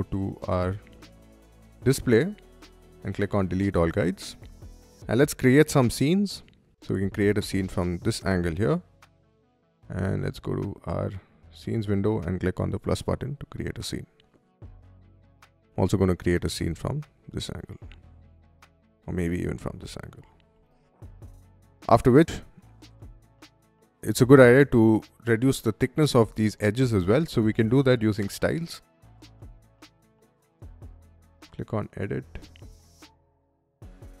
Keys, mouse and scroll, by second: 1.2 click, 2.7 click, 3.6 middle click, 5.0 middle click, 6.2 shift+middle click, 6.5-8.2 shift+middle drag, 10.4 shift+click, 12.1 click, 15.0-16.8 middle drag, 17.5 shift+click, 18.5 shift+middle click, 18.8-20.5 shift+middle drag, 20.9 shift+click, 21.3 click, 30.4 click, 32.3 click, 33.8 click.